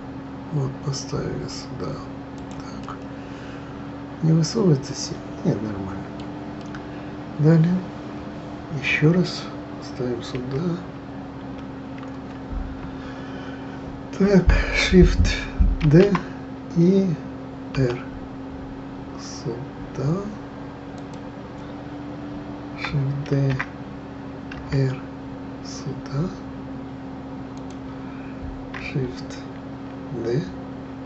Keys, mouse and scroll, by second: 2.8-5.9 middle drag, 6.6-9.6 middle drag, 10.3 KP_1, 11.4 KP_1, 15.8 shift+d, 23.3 shift+d.